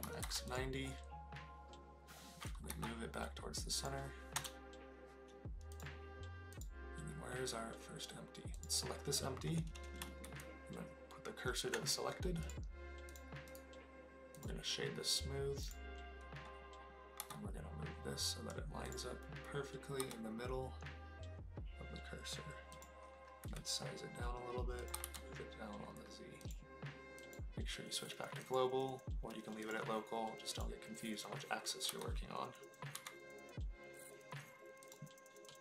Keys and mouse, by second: 0.0 KP_9, 0.2 KP_0, 0.5 click, 2.7 g, 3.8 click, 4.3 KP_0, 5.7 click, 6.5 click, 8.5 click, 10.2 shift+s, 13.6 click, 17.2 g, 18.9 click, 20.0 g, 22.7 click, 23.4 s, 24.8 click, 24.9 g, 25.0 z, 26.4 click, 27.3-31.0 drag, 31.9 g, 32.9 z, 34.8 click.